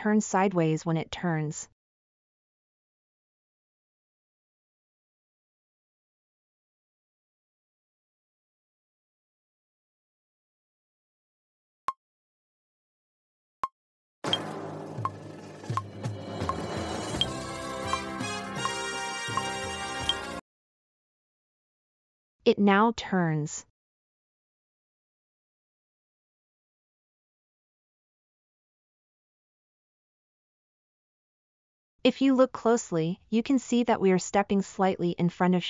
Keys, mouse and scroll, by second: 0.4-1.1 scroll down 2, 3.0-3.6 shift+middle drag, 11.0 middle click, 28.4-33.9 scroll up 2, 33.9-35.6 scroll up 1.